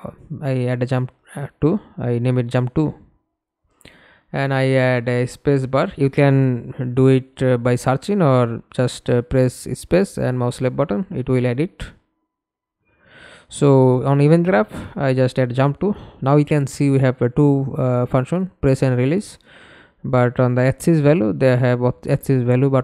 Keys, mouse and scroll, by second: 0.6 space, 1.1 space, 4.0-5.3 typing, 9.2 right click, 10.1 right click, 11.1-12.5 typing, 13.4 Return, 14.1-14.4 scroll up 1, 14.4 right click, 17.7-19.0 typing, 19.4 Return.